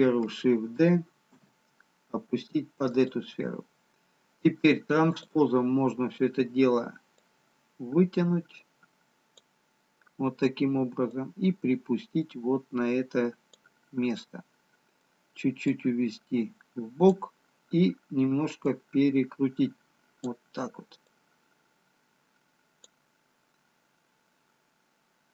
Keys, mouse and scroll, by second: 1.2 shift+d, 4.9 click, 7.8 click, 11.2 click, 14.4 middle click, 16.9 click, 21.3 click.